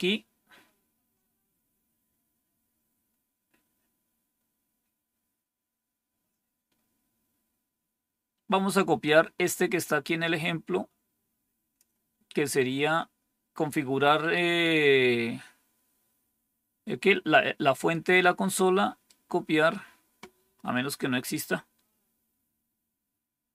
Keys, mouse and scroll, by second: 0.4-5.7 scroll down 1, 5.7-8.9 scroll down 1, 8.9-11.7 drag, 17.8-19.0 right drag.